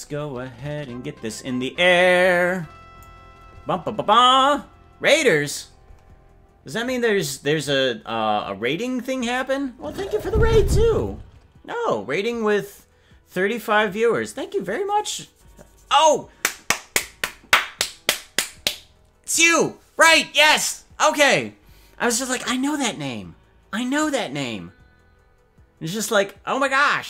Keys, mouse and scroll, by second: 1.9-3.0 drag.